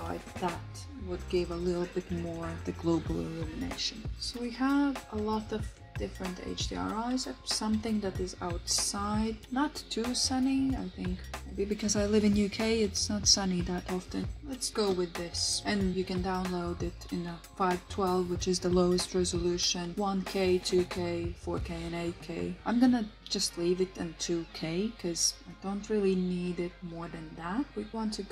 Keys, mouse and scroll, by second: 14.2-27.7 drag, 14.2 typing.